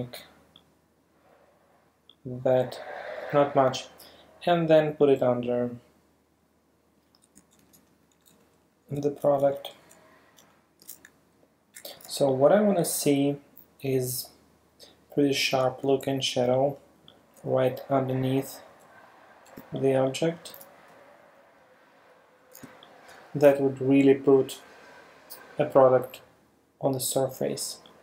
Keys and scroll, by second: 7.7 shift+Right, 8.2 shift+Up, 9.1 shift+Left, 9.8 shift+Up, 10.4 shift+Left, 10.9 shift+Down, 12.1 super+space, 15.9 alt+super+space, 18.2 alt+super+Down, 19.6 super+space, 21.3 Down, 21.6 Left, 22.9 super+space, 27.6 super+space.